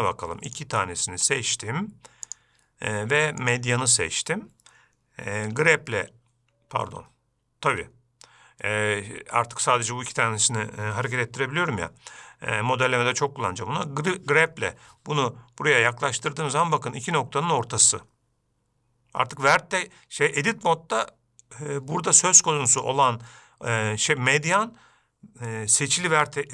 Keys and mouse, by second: 2.8-4.5 drag, 6.1 g, 14.4 g, 23.1-26.5 drag.